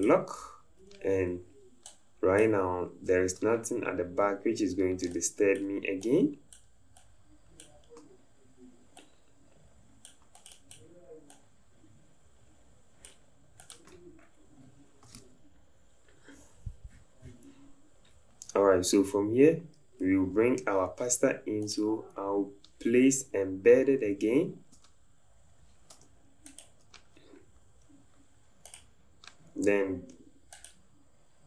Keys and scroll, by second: 24.8 Tab.